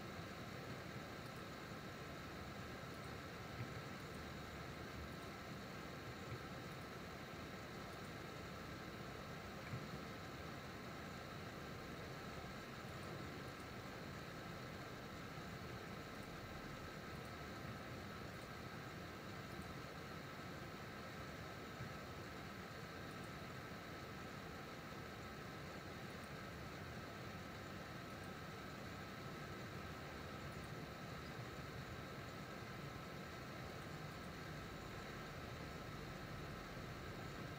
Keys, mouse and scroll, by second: 1.0 ctrl+r, 3.8 ctrl+r, 9.8 ctrl+r, 15.8 ctrl+r, 18.0 ctrl+r, 21.8 ctrl+r, 27.3 ctrl+r, 31.6 ctrl+r.